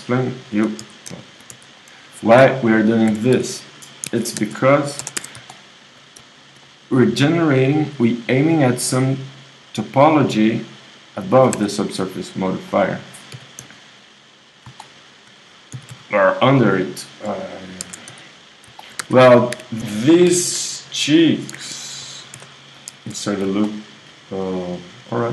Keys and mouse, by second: 0.8-3.3 typing, 1.5 right click, 5.2 Tab, 11.6 Tab, 13.3 g, 16.2 g, 17.8 ctrl+Tab, 19.0 KP_1, 19.5 KP_1, 20.3 g, 22.4 ctrl+r.